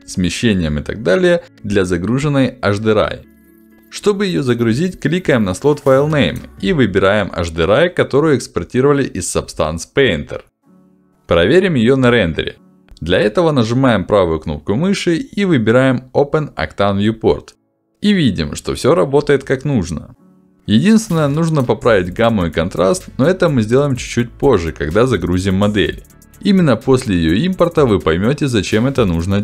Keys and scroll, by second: 6.0 ctrl+alt+d.